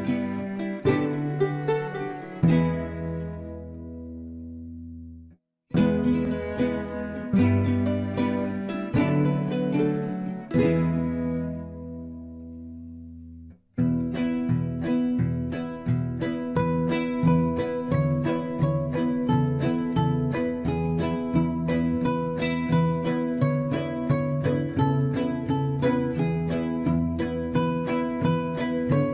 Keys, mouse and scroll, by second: 0.0 middle click, 0.3 scroll up 2, 0.4 middle click, 0.8 click, 1.0 alt+shift+click, 1.2 r, 1.9 scroll down 2, 2.0 middle click, 2.2 scroll up 1, 2.3 click, 2.5 alt+shift+click, 2.9 alt+shift+click, 3.2 click, 3.3 scroll up 1, 3.5 alt+shift+click, 3.8 r, 4.1 scroll down 1, 4.1 middle click, 4.7-5.3 scroll up 1, 5.5 ctrl+r, 6.3 g, 6.7 scroll down 1, 6.8 middle click, 7.4-7.8 scroll down 3, 7.8 click, 8.2 click, 8.8 scroll down 1, 8.9 right click, 9.2 middle drag, 9.4-9.7 scroll up 4, 9.5 middle click, 9.7 Tab, 9.8 middle click, 10.2 click, 10.4 alt+shift+click, 10.6 r, 11.1 g, 12.1 scroll down 1, 12.2 Tab, 12.3 middle drag, 12.5 Tab, 12.6 Tab, 13.0 click, 13.1 Tab, 13.6 Tab, 13.7 Tab, 14.3 click, 14.5 Tab, 14.6 Tab, 14.7 middle click, 15.0 alt+shift+click, 15.1 scroll down 1, 15.2 middle click, 15.5 r, 16.4 Tab, 16.6 middle click, 16.7 Tab, 16.8 scroll up 1, 17.0 alt+shift+click, 17.2 click, 17.4 middle click, 18.0 r, 18.9 g, 19.3 Tab, 19.4 middle click, 19.9 Tab, 20.1 middle click, 20.3 scroll up 1, 20.5 click, 21.0 r, 21.3 Tab, 21.5-21.9 scroll down 3, 21.6 Tab, 21.7 Tab, 21.9-22.4 middle drag, 22.6 click, 22.7 Tab, 22.9 middle click, 23.2 scroll up 4, 23.3 middle click, 23.8-26.1 typing, 24.5 ctrl+z, 25.0 scroll up 2, 25.7 click, 25.8 alt+shift+click, 26.8 Tab, 26.9 scroll down 3, 27.1 middle click, 27.6-28.6 scroll down 4, 28.6 KP_7.